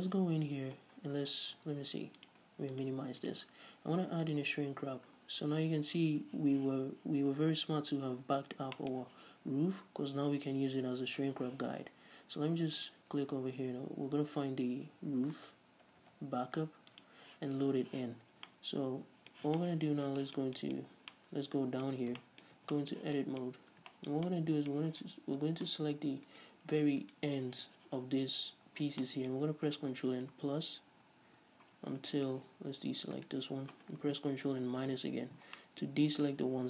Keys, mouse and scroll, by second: 1.0 scroll down 2, 1.2-2.2 scroll up 2, 2.2 click, 2.8-8.8 drag, 4.9 scroll down 2, 5.2-6.8 scroll up 2, 8.8-12.8 middle drag, 12.8-18.5 drag, 16.1 o, 18.5-26.3 middle drag, 20.9-21.2 scroll up 1, 22.6 Tab, 23.6-24.0 scroll up 2, 26.3 alt+right click, 27.1-28.1 alt+shift+right drag, 28.9 scroll down 2, 29.1-33.2 middle drag, 30.3 ctrl+KP_Add, 31.9 scroll up 2, 33.2 alt+shift+right click, 34.8 ctrl+KP_Subtract, 35.6-36.6 middle drag, 36.3 z.